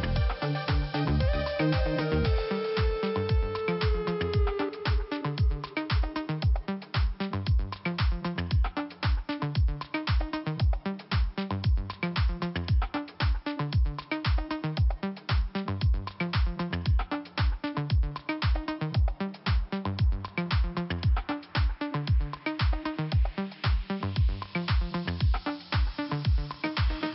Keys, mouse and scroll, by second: 0.1 middle click, 1.2-1.6 scroll up 1, 3.2 click, 3.9 scroll up 2, 4.1 click, 5.8 click, 9.5 click, 11.2 click, 12.7 click, 12.9 click, 13.0 double click, 13.4 double click, 13.5 double click, 15.3 click, 16.5 click, 16.7 click, 16.7 double click, 17.2 middle click, 17.6-18.1 scroll down 2, 18.1 middle click, 20.1 click, 22.4 click, 25.5 click.